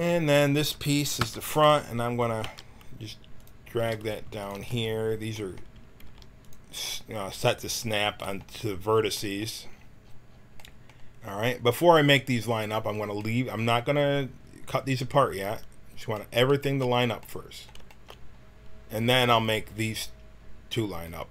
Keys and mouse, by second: 1.2 l, 2.7 g, 3.8 g, 6.0 g, 15.6-17.1 middle drag.